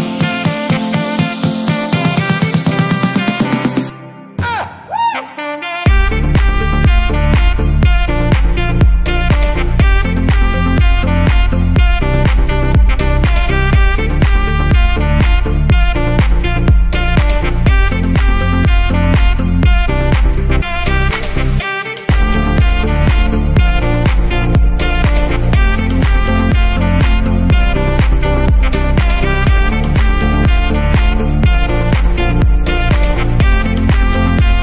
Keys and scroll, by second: 14.2 ctrl+c, 14.4 ctrl+f.